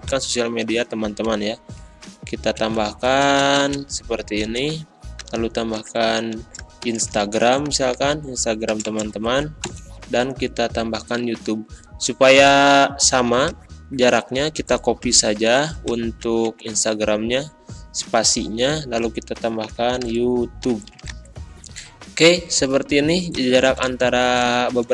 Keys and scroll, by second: 1.3 space, 5.7-9.6 typing, 15.0 ctrl+c, 16.4 ctrl+v, 19.6-21.1 typing, 23.5 space.